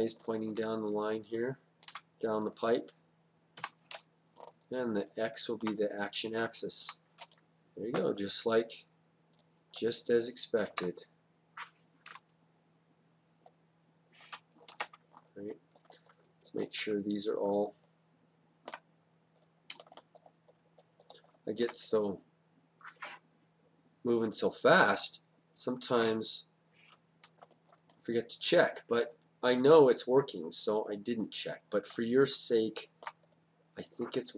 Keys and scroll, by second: 1.9 F8, 6.9 F8, 10.7 ctrl+z, 12.1 Down, 14.7 ctrl+z, 26.1 F8.